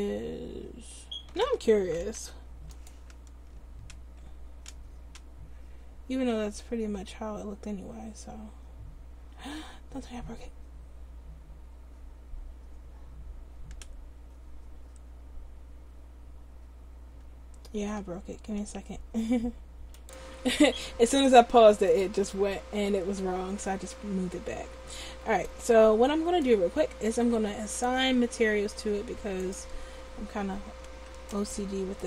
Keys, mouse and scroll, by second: 2.2 u, 21.9-24.1 drag, 24.3-25.6 middle drag, 30.9 Tab.